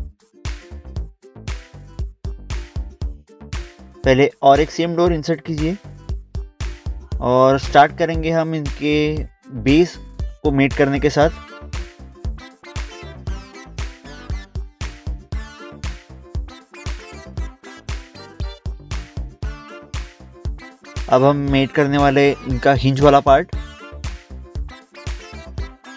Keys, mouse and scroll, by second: 1.3 scroll down 1, 2.9 scroll up 1, 3.2 middle click, 3.5 middle click, 3.7 scroll down 1, 5.0 ctrl+click, 6.3 scroll down 1, 7.1 click, 8.6 scroll up 1, 9.5 middle click, 10.3 scroll up 1, 10.4 scroll down 1, 11.1 scroll up 1, 11.3 scroll down 1, 12.4 click, 13.4 right click, 13.6 scroll up 1, 14.0 scroll down 1, 15.1 click, 15.6 scroll up 1, 16.0 middle click, 16.7 middle click, 17.6 click, 18.7 right click, 19.0 scroll up 1, 19.2 scroll down 1, 19.4 scroll up 1, 19.5 scroll down 1, 19.8 scroll up 1, 20.6 middle click, 21.0 middle click, 21.1 scroll up 1, 21.3 scroll down 1, 22.4 click, 22.7 scroll up 1, 24.0 middle click, 24.4 middle click, 24.5 scroll up 1, 24.7 scroll down 1.